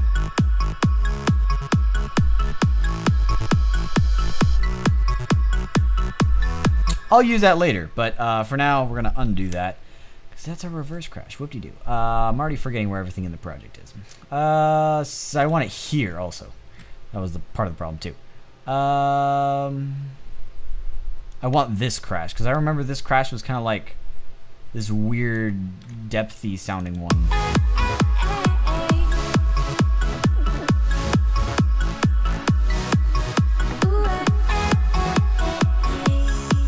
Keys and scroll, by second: 6.2 space, 8.8 super+z.